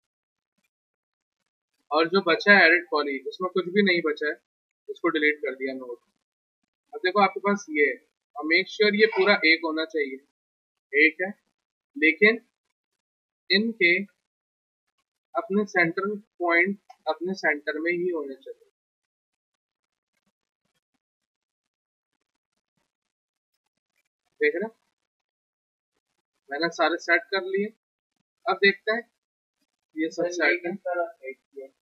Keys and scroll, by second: 1.1 Return, 4.5 Delete, 10.6 ctrl+z, 20.1 e, 21.4 r, 22.4 e, 22.8 w, 24.5 e, 25.4 r, 26.6 w, 29.0 e, 29.5 r, 29.8 w.